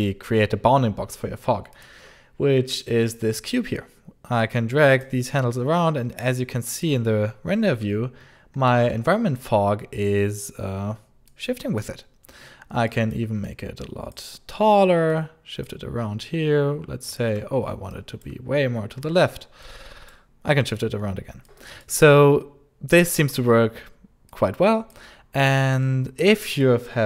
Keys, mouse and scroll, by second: 1.6 alt+click, 4.3 click, 6.1 click, 8.1 alt+middle click, 8.3 alt+click, 8.3 alt+click, 8.4 alt+click, 11.2 click, 12.3 scroll down 1, 12.7 alt+click, 13.3 alt+click, 15.0 alt+click, 17.3 scroll down 1, 17.8 alt+click, 18.1 alt+click, 18.1 alt+click, 18.3 scroll down 1, 18.6 alt+middle click, 18.8 alt+middle click, 19.5 click, 20.5 alt+middle click, 21.3 alt+click, 21.4 alt+click, 21.6 alt+click, 24.2 alt+click, 25.6 alt+click, 25.9 alt+click, 26.2 alt+click.